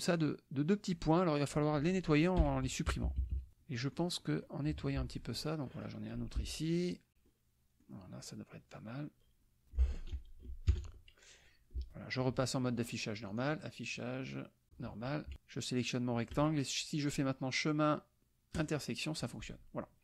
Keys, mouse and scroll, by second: 0.2-1.2 drag, 2.4 Delete, 2.9 KP_Subtract, 3.7 click, 4.2 click, 5.3 click, 6.4 BackSpace, 7.3 click, 8.2-10.0 drag, 10.8 ctrl+KP_Add, 13.3 click, 14.7 click, 15.3 KP_Subtract, 15.9 shift+click, 17.1 click, 18.6 click, 19.3 click.